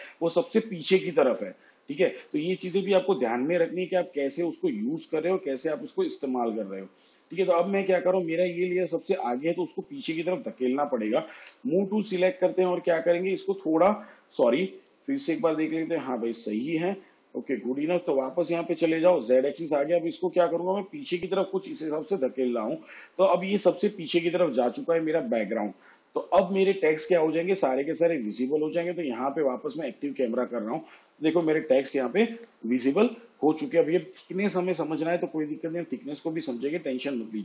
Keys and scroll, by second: 11.4 v, 31.7 shift+/.